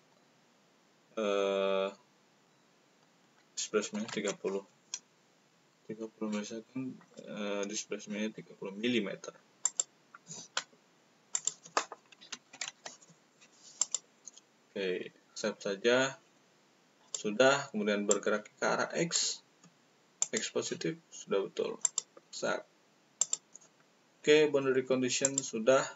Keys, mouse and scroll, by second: 3.8 3, 7.0 click, 9.6 click, 11.2 click, 12.1 d, 12.4 s, 13.7 click, 17.0 click, 18.1-18.5 drag, 20.1 click, 21.8 click, 23.1 click, 25.1 click.